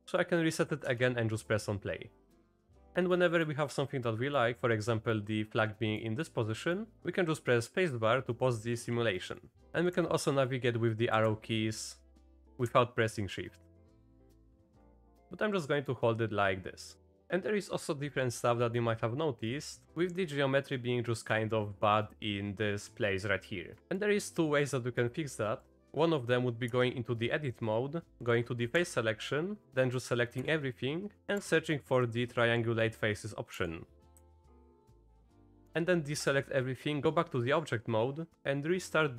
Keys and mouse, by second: 0.0 shift+Left, 0.1 click, 0.8 space, 3.1 click, 4.0 click, 5.0 drag, 5.8 drag, 6.5 drag, 9.3 click, 9.9-11.0 Left, 11.3-12.4 Right, 12.7-13.8 Left, 14.0-15.2 Right, 17.2 click, 18.7 click, 23.8 click, 24.8-25.1 drag, 25.7 click, 26.7 Tab, 28.8 3, 29.9 click, 30.4 a, 31.5 F3, 35.6 Tab, 36.2 click, 37.7 Tab.